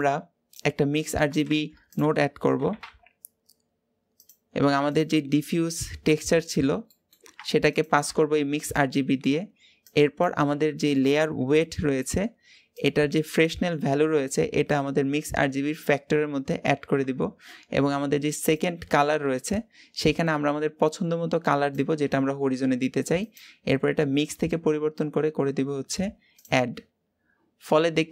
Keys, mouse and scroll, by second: 6.0-7.6 drag, 9.7-15.6 drag, 20.0 click, 27.4-27.8 scroll down 2.